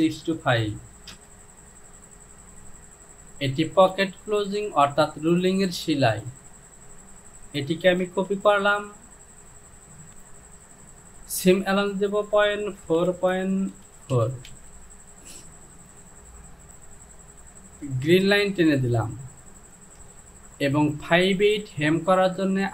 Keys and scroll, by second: 0.0 KP_6, 0.3 KP_2, 0.5 KP_5, 1.2 Return, 8.1 ctrl+c, 10.1 Down, 10.1 KP_Decimal, 13.2 Down, 13.8-14.5 typing, 16.7 Home.